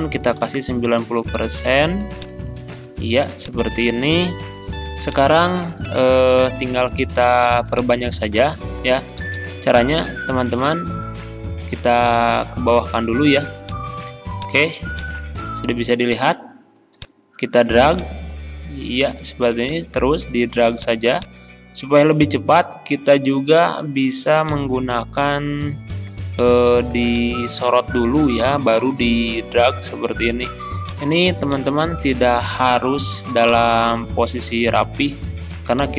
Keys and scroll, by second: 0.4 9, 0.6 0, 1.0 Return, 9.2 ctrl+z.